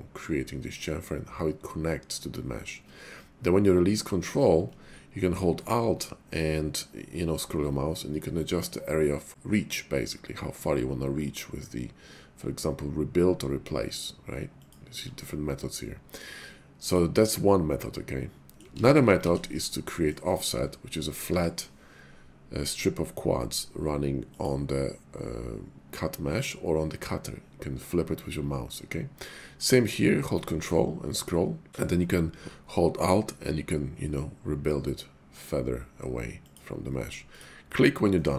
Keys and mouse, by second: 14.6 alt+click, 16.9 click, 17.3-18.6 middle drag, 18.8 ctrl+z, 19.2 ctrl+z, 19.7 click, 20.4 click, 21.2 y, 36.5 alt+click, 38.1-38.3 middle drag.